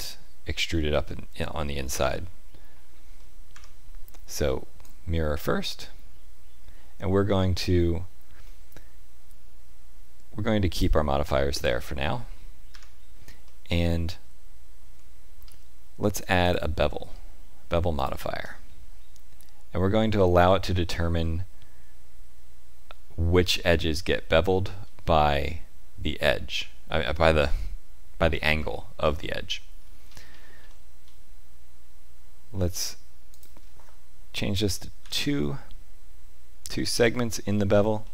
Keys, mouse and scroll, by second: 1.0 middle click, 1.9 Tab, 3.1 middle click, 3.5 Tab, 4.8 click, 8.4 middle click, 10.7 click, 12.6 Tab, 13.4 middle click, 14.8 Tab, 15.4 scroll up 1, 16.4 click, 28.5 shift+middle click, 29.2 middle click, 30.0-30.5 scroll up 2, 30.6 shift+middle click, 33.3 click, 36.7 middle click, 37.5-37.9 scroll up 1, 38.0 shift+middle click.